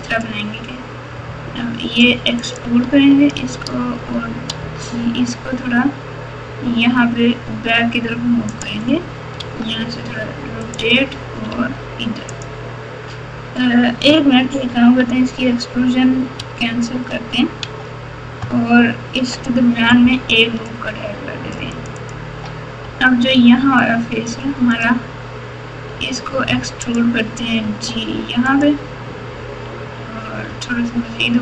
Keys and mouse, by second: 1.1 e, 4.6 g, 9.3 s, 11.5 r, 14.6 ctrl+z, 14.9 ctrl+z, 15.3 ctrl+z, 16.3 ctrl+z, 17.6 ctrl+z, 19.1 ctrl+r, 23.3 3, 23.7 click, 24.0 click, 24.7 click, 25.9 e, 27.6 g, 30.4 g.